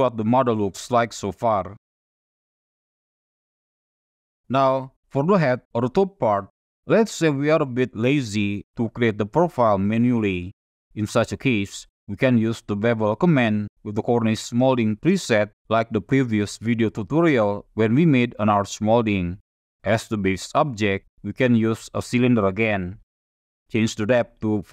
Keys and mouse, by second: 0.1-0.5 shift+middle drag, 0.8-2.5 middle drag, 2.8 shift+middle drag, 3.4 middle click, 4.4 middle click, 19.6 shift+a, 22.6-24.0 middle drag, 24.3 click.